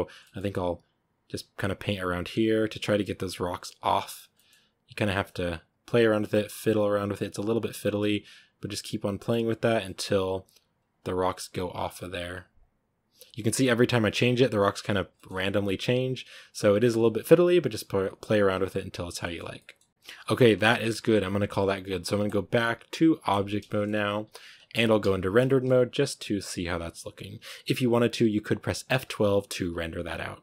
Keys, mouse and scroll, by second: 0.1-0.5 shift+middle drag, 0.5-4.2 drag, 4.2-5.3 middle drag, 5.3-9.7 drag, 9.7-10.2 middle drag, 10.2-15.0 drag, 15.0 shift+middle drag, 15.3 scroll down 1, 15.5-16.6 drag, 16.6-17.1 shift+middle drag, 17.1-17.5 scroll up 1, 17.5-19.1 drag, 19.1 middle drag, 19.3 scroll down 1, 19.4-19.9 middle drag, 19.9 KP_0, 20.4-23.3 shift+middle drag, 23.3 drag, 23.5-24.0 shift+middle drag, 24.0 a, 25.1 z, 25.3 shift+middle drag, 25.6 scroll up 1, 30.2 z.